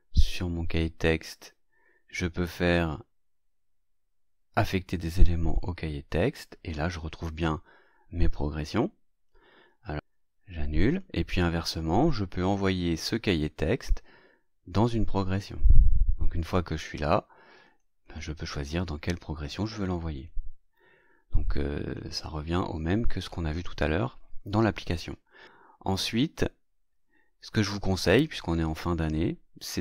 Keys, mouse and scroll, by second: 0.4 right click, 5.5 click, 10.8 click, 12.3 right click, 15.5 click, 17.6 click, 18.0 click, 20.1 click, 21.7 click, 29.6 click.